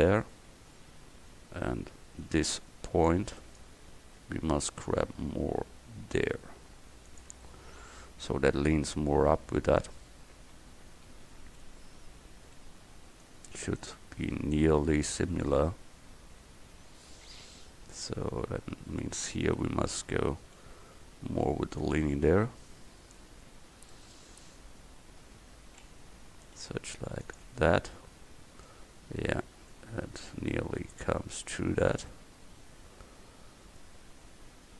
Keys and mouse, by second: 0.1 a, 2.3 c, 5.1 g, 7.4 Tab, 9.9 Tab, 10.4 a, 12.0 v, 12.9 c, 13.8-15.6 drag, 15.6 Tab, 19.1 Tab, 20.7 g, 22.1 Tab, 25.3 Tab, 26.7 g, 27.5 Tab, 33.9-34.7 middle drag.